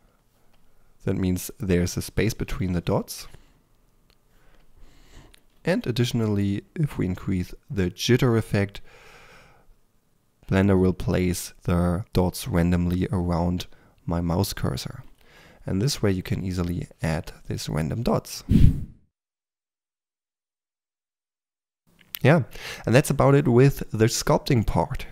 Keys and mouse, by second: 2.7 ctrl+z, 5.6 ctrl+z, 18.7-19.9 drag, 19.9 f, 20.2 f, 20.3-21.8 drag, 20.8 f, 22.1 middle click, 22.3-23.7 drag.